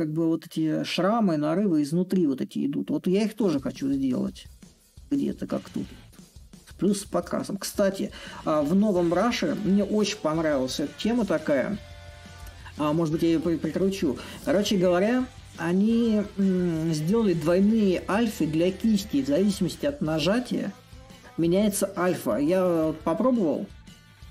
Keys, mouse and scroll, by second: 4.6-11.7 middle drag, 12.7-17.7 drag, 19.3-24.3 drag.